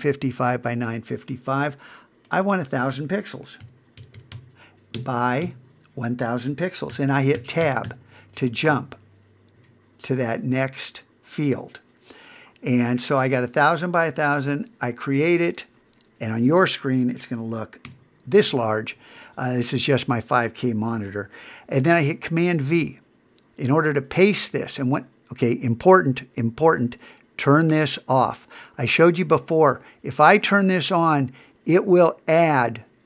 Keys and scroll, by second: 17.9 super+=, 23.7 super+v.